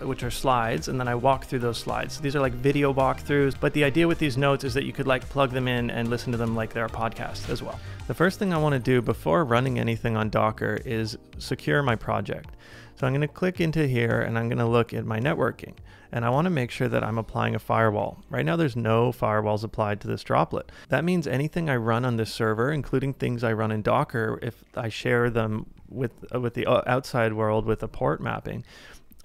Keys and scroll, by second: 8.4 super+Tab.